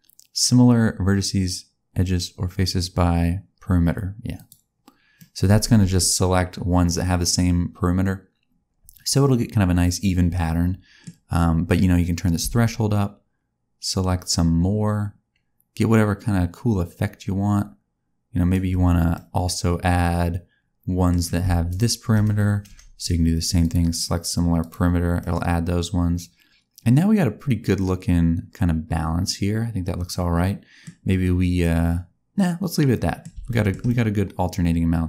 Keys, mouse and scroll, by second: 5.1 middle click, 12.2 click, 19.1 middle click, 21.6 shift+click, 23.6 F3, 25.1 middle click, 31.5 middle click, 33.4 shift+middle click.